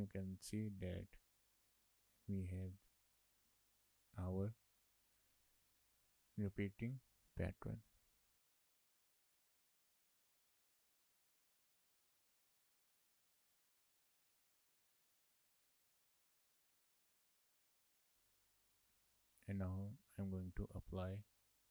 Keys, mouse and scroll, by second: 9.8 shift+middle click, 10.0-10.8 scroll down 1, 10.8 click, 12.4 click, 12.5-13.6 scroll up 9, 12.7 shift+middle click, 12.9 shift+middle click, 13.3 shift+middle click, 13.4 Tab, 13.6 Tab, 13.8 shift+middle click, 14.0 a, 14.3 scroll up 2, 14.4 shift+middle click, 14.6 scroll down 3, 14.8 Tab, 15.2 click, 15.4 scroll up 1, 15.7 click, 16.1 Tab, 16.4 click, 17.7 click, 17.9 Tab, 18.1 shift+middle click.